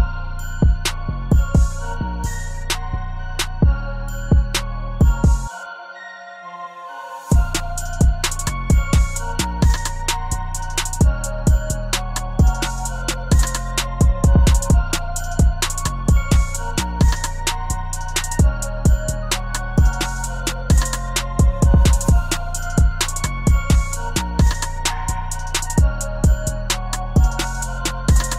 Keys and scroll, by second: 8.2 ctrl+t.